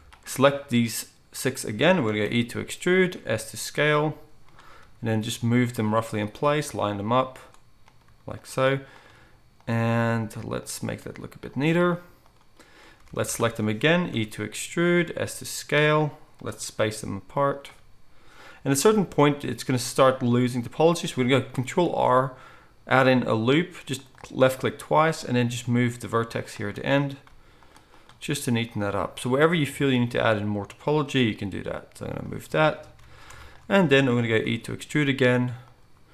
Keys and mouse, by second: 2.2 e, 3.2 s, 4.8 g, 6.2 click, 6.4 g, 9.1 g, 10.1 g, 11.9 g, 13.0 alt+a, 14.1 e, 15.0 s, 16.8 g, 21.8 ctrl+r, 25.6 g, 27.2 g, 31.2 g, 33.0 alt+a, 34.4 e.